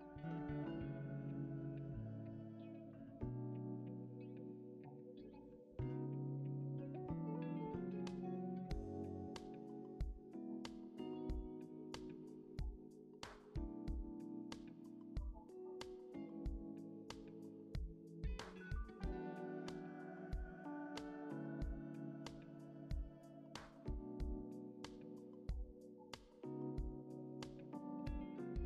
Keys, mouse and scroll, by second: 1.3 scroll up 2, 2.5 shift+click, 3.9 shift+click, 4.1 middle click, 4.3 shift+click, 5.3 shift+click, 6.3 middle click, 7.7 d, 8.3 Escape, 9.0 p, 9.6 Tab, 9.7 double click, 10.2 Tab, 10.7 typing, 11.7 alt+e, 12.9 typing, 16.2-17.0 typing, 17.8 ctrl+click, 18.3 alt+e, 20.6 typing, 21.0 shift+click, 21.4 ctrl+click, 22.2-25.7 typing, 26.8 Tab, 27.1-28.1 typing, 28.1-28.6 scroll down 1.